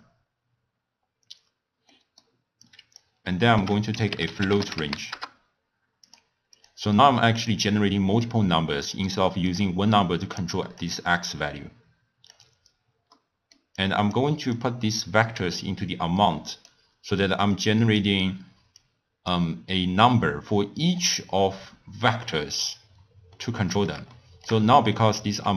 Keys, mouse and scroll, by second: 0.7 scroll down 1, 1.4-1.9 scroll down 4, 1.9-2.6 middle drag, 2.6 click, 3.5 ctrl+a, 6.5-8.5 drag, 8.5-9.4 scroll up 3, 9.4 scroll down 1, 9.5-11.2 drag, 13.1 middle click, 13.7 click, 14.5-17.6 drag, 18.7 click, 23.3-25.5 middle drag.